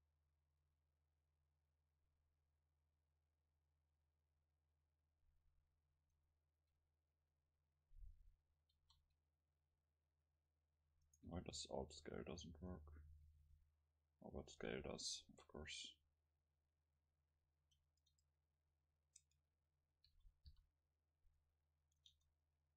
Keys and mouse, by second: 0.1-2.3 middle drag, 5.9-8.5 middle drag, 8.8 alt+s, 11.2-13.4 middle drag, 13.4 s, 15.2 click, 15.2 KP_0, 16.7-18.6 drag, 18.1 Tab, 19.2 Tab, 20.1 s, 22.1 Tab, 22.1-22.7 drag.